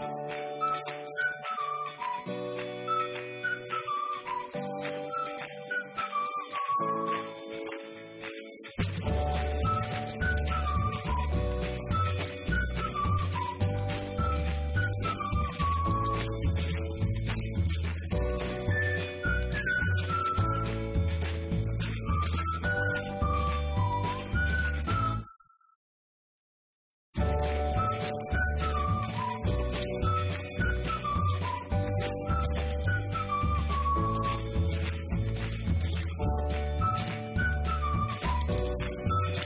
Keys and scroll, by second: 6.6 5, 12.9-15.5 typing, 18.3-19.2 typing, 23.0 0, 24.5-25.9 typing.